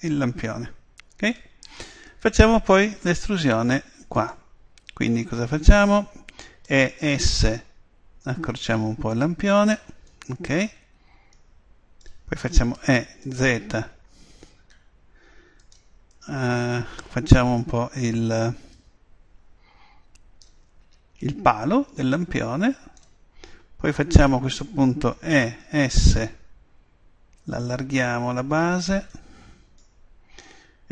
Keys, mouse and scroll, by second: 1.2-4.2 middle drag, 4.2-6.0 right drag, 6.7 e, 9.7 click, 11.5-13.2 middle drag, 12.7 e, 15.7 click, 16.3-17.4 middle drag, 17.6-18.7 middle drag, 18.7 click, 22.1 click, 24.0-25.7 middle drag, 28.7 click.